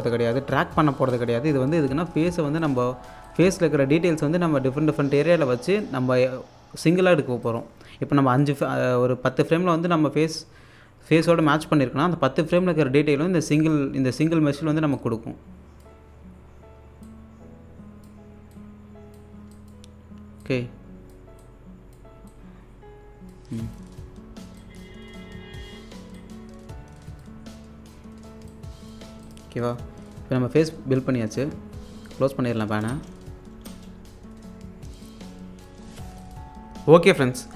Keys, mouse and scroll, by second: 1.5-2.4 scroll up 1, 2.6-7.4 alt+drag, 10.5-14.9 drag, 14.9 alt+click, 16.2-16.5 scroll down 1, 17.0-19.4 drag, 19.4 scroll down 1, 19.5-23.6 alt+drag, 24.0-24.6 scroll down 1, 24.6-27.4 drag, 27.4-28.3 scroll down 1, 28.5 click, 31.3 right click, 32.1 click, 32.9 space, 35.1 click, 35.8 scroll down 1, 36.2 alt+click.